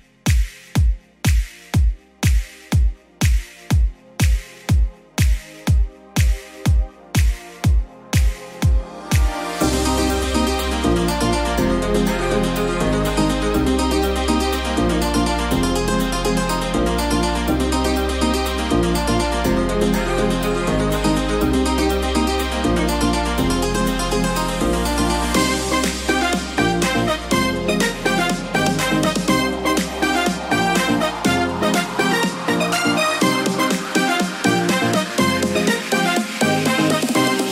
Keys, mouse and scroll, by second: 13.8 F9, 15.3 space, 22.2 alt+], 28.8 u, 31.8 ctrl+c, 37.3 ctrl+v.